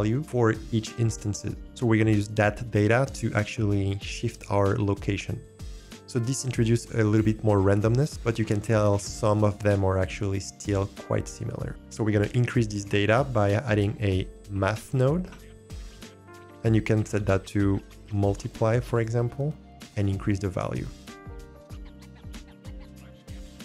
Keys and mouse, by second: 3.0-5.4 drag, 13.8 BackSpace, 17.2-19.0 drag, 20.1-22.7 drag.